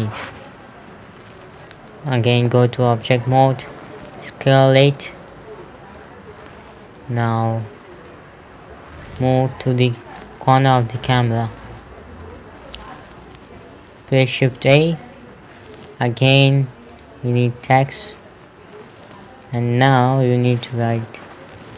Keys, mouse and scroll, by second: 2.5 click, 4.5 s, 5.4 click, 15.0 shift+a, 17.4 click, 19.9 click.